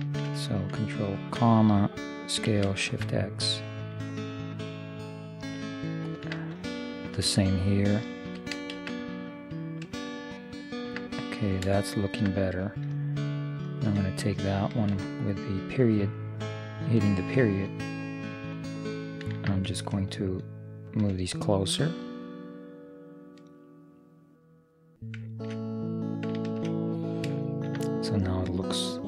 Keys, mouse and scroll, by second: 1.3 ctrl+,, 2.5 s, 7.0-8.7 right drag, 8.4 s, 11.2 middle click, 13.7-15.5 right drag, 15.0 ., 15.3-18.1 drag, 20.9-22.8 right drag, 22.1-24.0 drag, 25.3-29.0 middle drag.